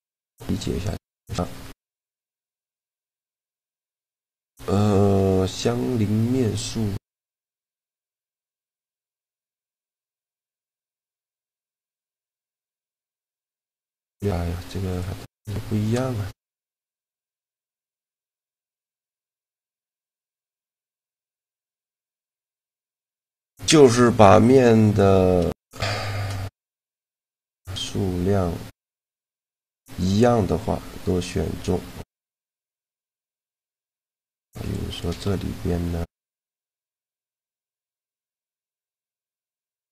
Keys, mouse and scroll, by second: 2.0 a, 2.4 shift+g, 8.1-11.5 middle drag, 10.4 click, 10.8 right click, 11.3 shift+g, 11.5 click, 11.5 right click, 12.3 right click, 14.7-16.4 drag, 15.3 shift+g, 17.9-21.1 middle drag, 20.3 a, 21.1 right click, 21.2-22.4 drag, 21.3 shift+g, 25.4 shift+g, 33.1 a, 35.0 x, 35.5 right click, 36.6 ctrl+x, 37.4 a, 37.9 a, 38.4 click, 38.9 w, 39.8 click.